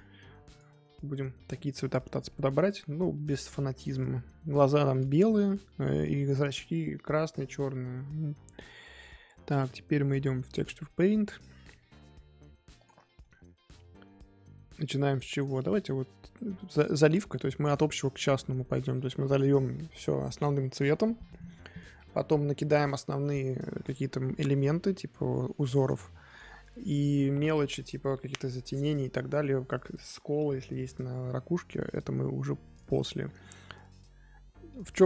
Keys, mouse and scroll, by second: 0.0 click, 2.3-2.6 middle drag, 2.6-3.3 scroll up 2, 8.4-10.5 middle drag, 10.5 click, 11.2 middle click, 11.5-12.8 scroll up 2, 12.8 click, 13.0-15.1 shift+middle drag, 15.1 drag, 16.2-32.7 middle drag, 32.7-35.0 drag.